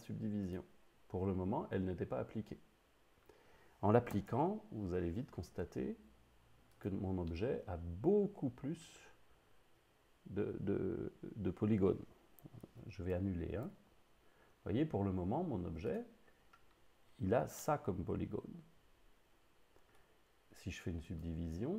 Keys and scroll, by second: 4.2 Tab, 12.6 super+z, 13.1 super+z, 13.7 super+z.